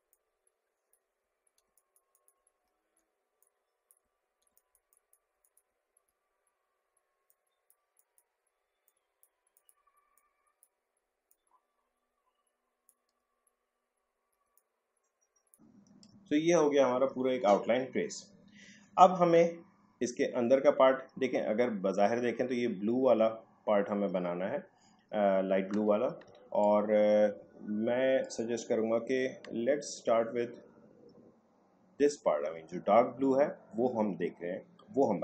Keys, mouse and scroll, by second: 1.3 alt+scroll down 1, 1.7 space, 1.7 click, 1.9 space, 2.1 click, 2.2 space, 2.7 alt+scroll up 1, 3.4 click, 4.1 alt+scroll down 1, 4.5 space, 4.5 click, 4.7 space, 4.9 click, 5.0 space, 5.4 click, 5.7 alt+scroll up 1, 7.3-13.3 drag, 13.3 alt+scroll down 1, 14.4 space, 14.5 click, 14.7 space, 15.5 click, 15.7 space, 26.2 space, 26.6 click, 26.7 space.